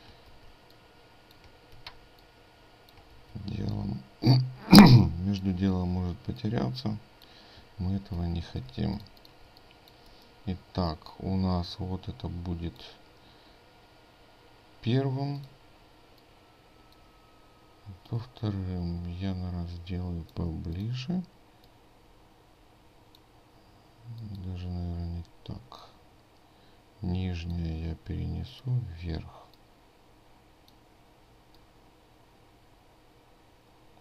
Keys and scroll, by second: 2.0 ctrl+g, 8.2 ctrl+g, 8.7 ctrl+space.